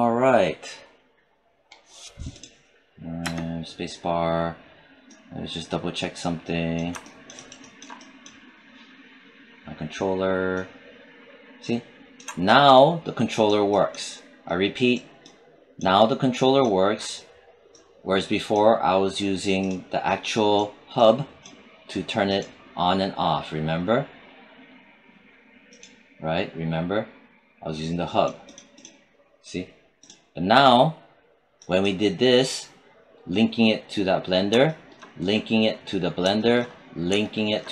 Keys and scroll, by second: 3.1 space.